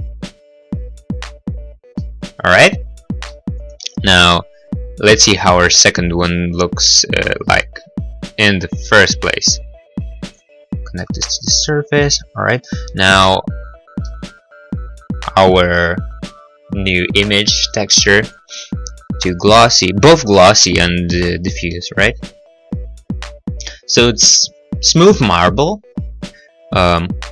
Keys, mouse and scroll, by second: 2.2 middle click, 2.4 middle click, 2.6-3.2 scroll, 3.5 middle click, 3.5 right click, 3.8 right click, 4.4 middle click, 6.1 click, 11.2 middle click, 11.5 middle click, 12.2 middle click, 13.1 scroll, 14.2 middle click, 14.2 scroll, 14.7 middle click, 15.5 click, 21.9 middle click, 21.9-22.3 scroll, 22.3 middle click, 27.0 middle click.